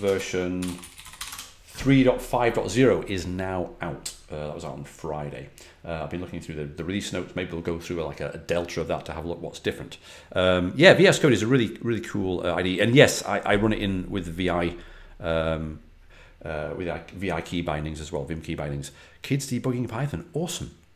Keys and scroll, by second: 0.0-1.6 typing.